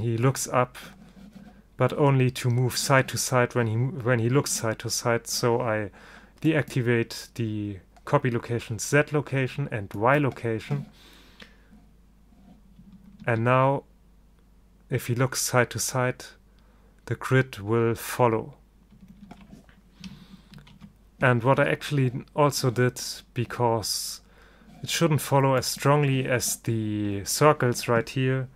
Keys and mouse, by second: 6.5-8.3 drag, 8.4 middle click, 10.1-11.9 drag, 13.3 alt+a, 20.7 ctrl+alt+shift+a, 25.7-27.5 drag.